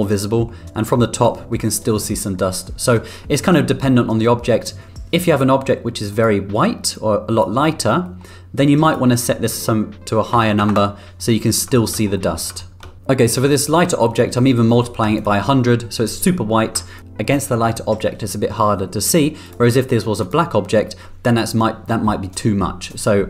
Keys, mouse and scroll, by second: 3.3-4.3 middle drag, 5.2 click, 8.0 middle click, 8.8-11.1 drag, 11.7 middle click, 12.1 middle click, 12.6 middle click, 15.1 ctrl+click, 17.0 ctrl+click.